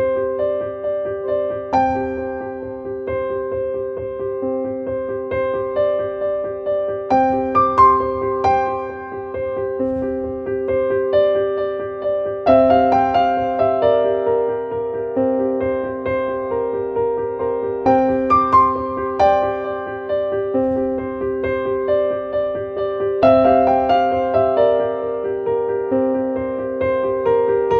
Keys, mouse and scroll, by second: 0.3 click.